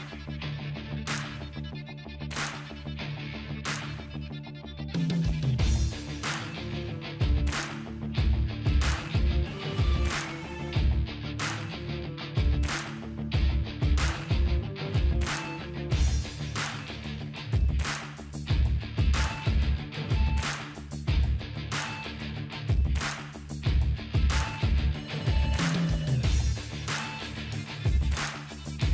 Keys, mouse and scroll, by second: 1.5 typing, 2.5 click, 4.2 ctrl+c, 5.4 click, 8.1 typing, 8.7 ctrl+v, 10.1-13.0 drag, 11.9 typing, 23.9 click, 26.5-27.3 drag.